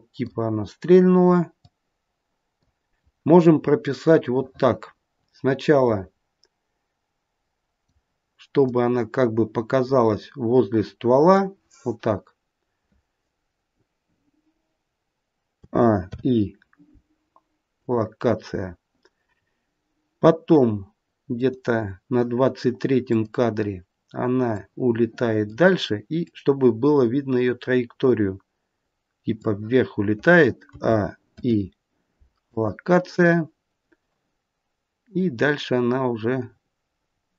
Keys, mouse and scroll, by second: 1.5 click, 3.8 click, 8.5 click, 15.5 a, 15.9 i, 19.2 scroll up 2, 21.2 click, 23.0 click, 24.4 click, 26.2 click, 30.6 a, 31.2 i, 35.0 click.